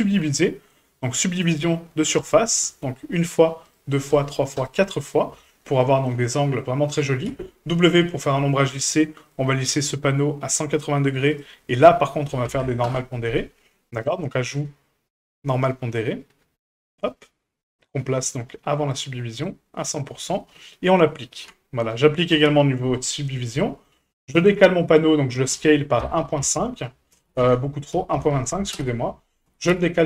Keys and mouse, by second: 0.2-2.2 drag, 3.6 click, 4.1 click, 4.5 click, 5.4-5.8 middle drag, 6.6 middle drag, 7.3 w, 11.3 click, 11.7-13.3 drag, 14.0 click, 15.4-16.9 drag, 18.2-19.0 drag, 19.4 click, 21.3 ctrl+a, 22.9 middle click, 24.1 shift+middle click, 24.4 middle click, 25.5 s, 29.5 g.